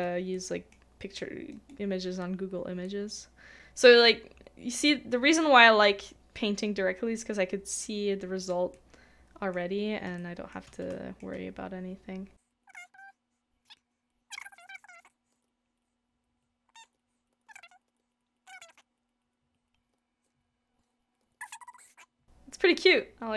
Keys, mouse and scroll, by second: 2.8 middle click, 10.2 shift+middle click, 10.9 shift+middle click, 14.7 shift+middle click, 15.3 shift+middle click, 16.9 shift+middle click, 17.5 shift+middle click, 18.6 shift+middle click, 20.0 shift+middle click, 21.2 shift+middle click, 21.6 shift+middle click, 21.8 shift+middle click.